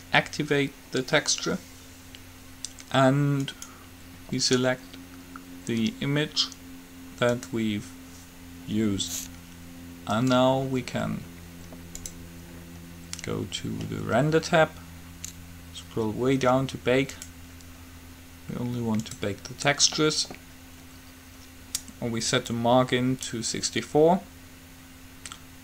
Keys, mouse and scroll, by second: 3.7-5.6 drag, 10.4-14.2 drag, 17.3-19.2 drag, 22.7-24.6 drag.